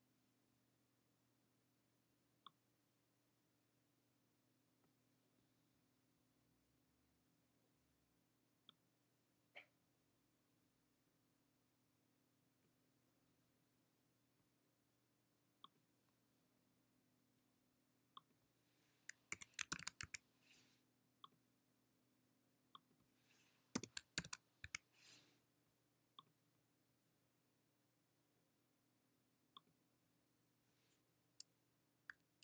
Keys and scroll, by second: 20.0 typing, 24.4-24.8 typing.